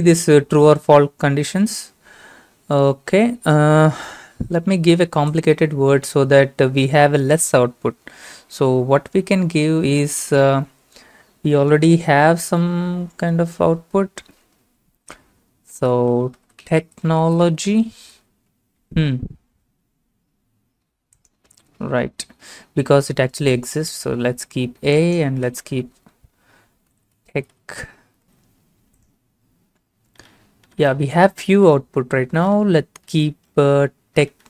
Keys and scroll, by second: 16.1-18.7 typing, 18.8 Return, 21.8 ctrl+v, 23.9 a, 26.5-27.9 typing, 28.2 ctrl+a, 28.2 ctrl+c.